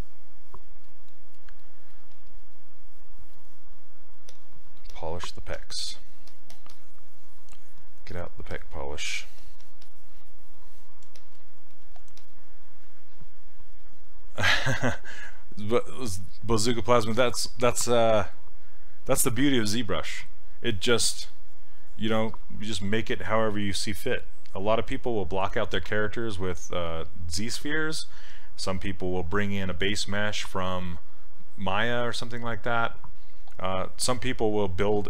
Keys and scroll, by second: 5.6 s.